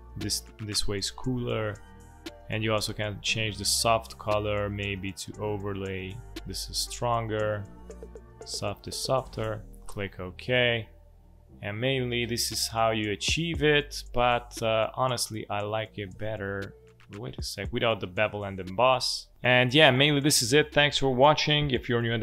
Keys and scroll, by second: 12.3 space.